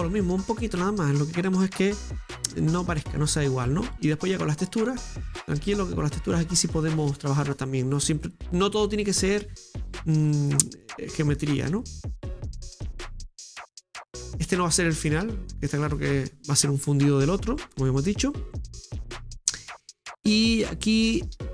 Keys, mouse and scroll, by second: 1.0 right click, 1.6 shift+right click, 2.0 click, 2.9 click, 3.8-5.2 middle drag, 5.2 right click, 5.7 shift+right click, 6.4 click, 7.4 click, 8.2 middle click, 9.1 right click, 10.0 shift+right click, 10.4-11.7 middle drag, 11.7-12.8 drag, 12.8 scroll down 1, 13.0-14.0 middle drag, 14.0 scroll up 7, 14.2-17.5 middle drag, 17.5 scroll down 3, 17.8-19.1 middle drag, 19.1 right click, 19.6 shift+middle click, 20.4 Tab, 21.3 middle click, 21.4-21.5 scroll up 2.